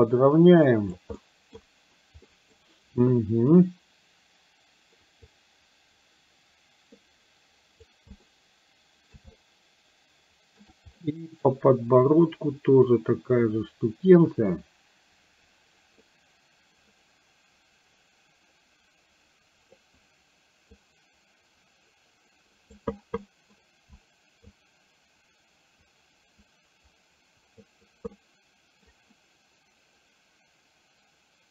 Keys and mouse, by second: 1.2 middle click, 2.4 middle click, 5.2-7.9 drag, 8.4 middle click, 9.4-10.7 shift+middle drag, 11.0 middle click, 12.1-19.9 drag, 20.9-22.7 drag, 23.4 middle click, 24.6-27.6 drag, 28.2 middle click.